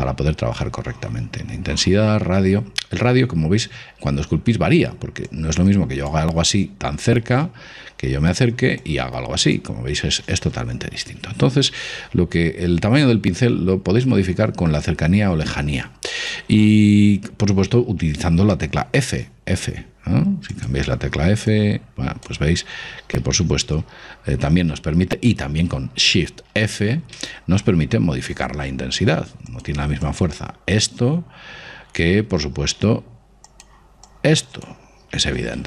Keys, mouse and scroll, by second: 3.0-5.4 middle drag, 5.4 click, 7.6 ctrl+z, 8.1 middle click, 8.2-8.6 scroll up 1, 9.0 click, 10.3 ctrl+z, 10.9 scroll down 1, 12.4-18.9 middle drag, 18.9 f, 21.7 click, 23.8 ctrl+z, 26.7 shift+f, 30.2 click, 32.5 shift+f, 34.3 click.